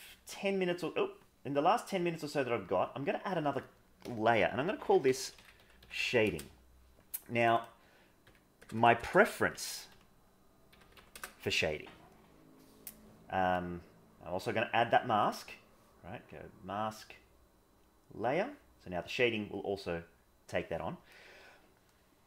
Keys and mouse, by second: 3.4-6.3 drag, 7.6-11.2 drag, 8.7 BackSpace, 15.5 click, 16.3-18.0 drag.